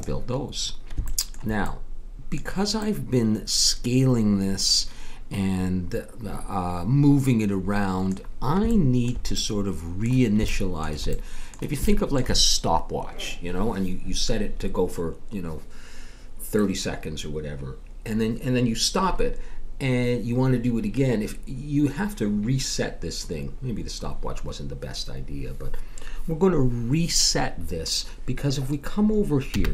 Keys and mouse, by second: 8.7-15.9 middle drag, 29.5 n.